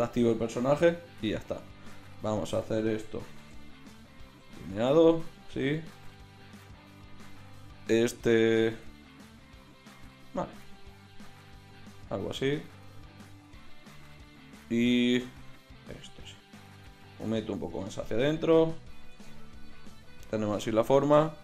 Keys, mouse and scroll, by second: 3.4 v, 4.4 v, 7.8-9.8 drag, 9.8 g, 10.8 click, 10.9 g, 12.2 g, 13.9-15.7 drag, 14.1 g, 15.8 g, 16.6-18.1 drag, 16.8 g, 19.1 Tab.